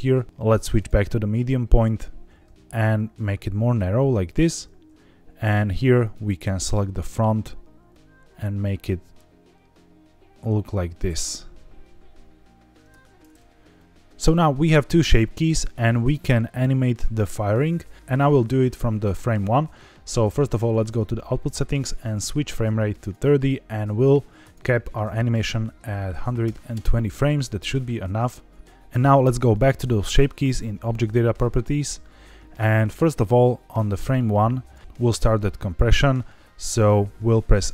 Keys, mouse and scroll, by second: 0.2 Escape, 0.7-1.9 drag, 2.5 s, 2.9-3.5 scroll down 4, 4.2 click, 6.0 alt+click, 6.8 s, 7.6-8.8 scroll up 6, 9.4-9.8 scroll up 3, 9.9-10.9 scroll down 7, 10.9-11.5 scroll up 4, 11.5-12.7 scroll down 1, 12.7 click, 12.7 middle click, 12.8 Tab, 20.7 click, 21.6-23.0 drag, 24.3-26.7 drag, 28.1 middle click, 29.4 click, 33.2-34.7 drag.